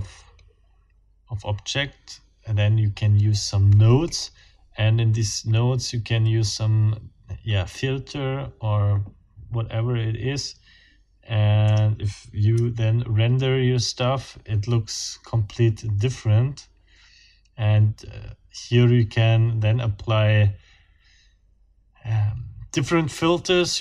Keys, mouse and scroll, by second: 4.1-4.4 scroll up 2, 4.4-11.0 drag, 11.7-12.0 scroll up 2, 12.6 F12.